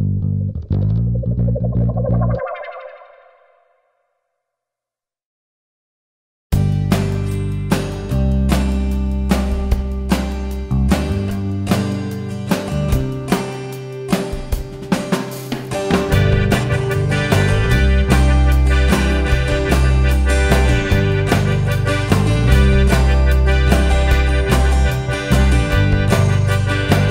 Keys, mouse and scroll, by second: 0.2 alt+a, 0.3 `, 2.4 click, 2.7 KP_Decimal, 3.0 scroll up 1, 3.1 alt+a, 4.3-4.8 scroll down 1, 4.8 KP_7, 5.6-6.2 scroll down 1, 6.2 scroll up 1, 6.4 Tab, 10.8 g, 11.2 alt+click, 11.5 g, 13.0 `, 13.6 scroll up 1, 13.7 `, 15.6 scroll down 1, 15.7 `, 16.1 Tab, 17.2 Tab, 18.9 scroll up 1, 19.2 scroll down 2, 19.4 `, 20.2-24.8 middle drag, 20.2-20.8 scroll down 2, 20.8 KP_7, 24.2 `, 24.4 click, 24.8 Tab, 24.8-27.1 right drag, 24.9 `, 26.3-26.6 scroll down 2, 26.6 alt+click.